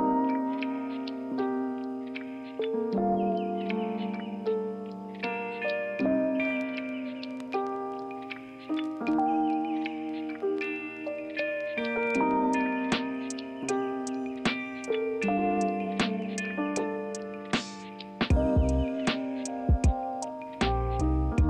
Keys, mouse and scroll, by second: 11.7 ctrl+z, 18.9 ctrl+z, 20.7 ctrl+z.